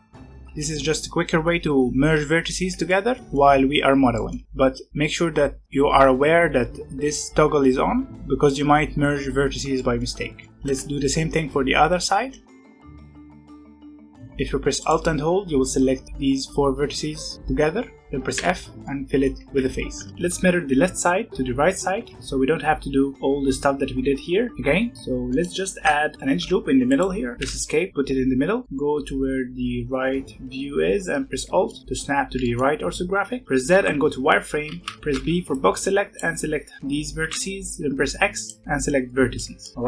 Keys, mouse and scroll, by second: 0.0 alt+a, 0.2 scroll down 1, 0.3 middle click, 0.4 g, 0.8-2.4 scroll down 1, 2.4-2.8 scroll down 1, 2.8-5.9 shift+middle drag, 9.8 middle click, 10.6-13.4 typing, 12.5 alt+click, 12.6 alt+a, 12.7 click, 13.1 click, 13.3 click, 13.7 alt+a, 13.9 alt+click, 14.0 alt+a, 14.8 alt+click, 18.3 f, 18.6 scroll down 2, 18.8 middle click, 19.4 alt+a, 19.6 scroll down 1, 19.9 Tab, 20.1 shift+middle click, 21.8 scroll down 1, 22.0 Tab, 22.5-24.5 scroll up 1, 24.9 middle click, 25.1 scroll down 1, 25.3 middle click, 26.1 ctrl+r, 28.5-30.8 middle drag, 32.0 scroll up 1, 32.3-33.4 shift+middle drag, 33.4 z, 35.0 alt+a, 35.0 b, 37.1 x, 39.1 scroll down 2, 39.3 middle click, 39.7 scroll up 1.